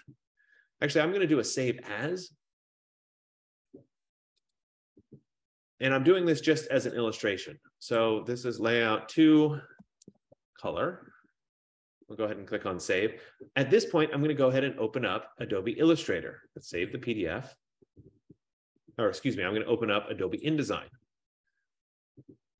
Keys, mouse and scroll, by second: 2.3 click, 4.8 click, 7.1 click, 8.2 click, 8.8 click, 9.7-11.3 typing, 17.0-18.9 drag, 19.2 F15, 20.6 click.